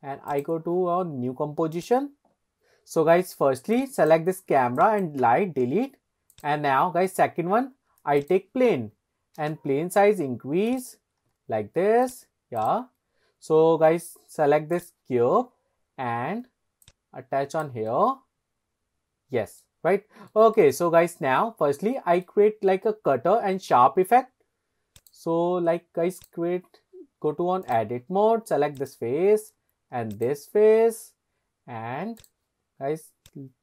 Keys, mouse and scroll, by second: 2.5 click, 3.8 click, 4.3 Delete, 4.8 click, 5.2 Delete, 6.3-8.3 drag, 9.4 s, 10.7 click, 11.2 s, 12.0 click, 12.6 click, 14.7 click, 16.8 ctrl+click, 17.9-19.6 middle drag, 19.9 scroll up 2, 20.3 shift+middle click, 20.7-21.4 middle drag, 21.6-21.9 scroll up 1, 22.0 shift+middle drag, 25.0-26.3 drag, 27.7 click, 28.8 click, 30.1 shift+click, 32.2 click, 33.3 click.